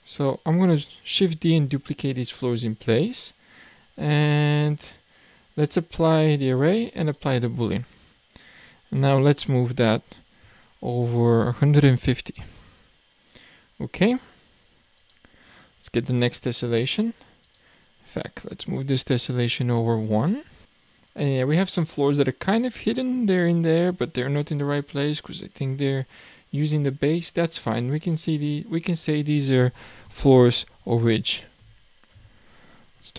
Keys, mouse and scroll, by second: 0.4-1.5 scroll down 2, 1.5 shift+d, 4.5-5.7 scroll down 2, 5.7-9.1 drag, 12.8-15.1 scroll down 2, 15.1 click, 17.5 click, 18.4 click, 19.3-20.3 scroll down 3, 20.3 click, 22.4 click, 28.0 click, 28.3-31.2 drag.